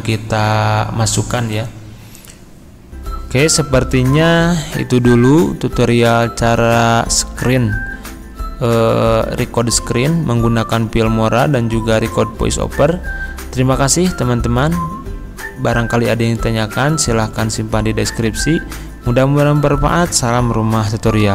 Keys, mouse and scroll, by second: 1.5 click.